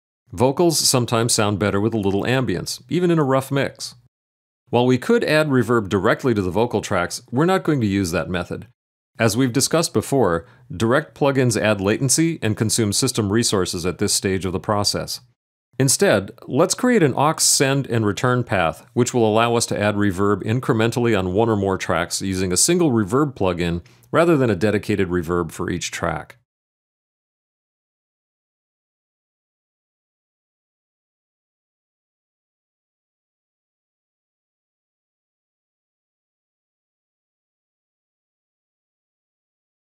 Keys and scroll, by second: 0.1 super+=, 1.6 space, 2.6 space, 3.3 space.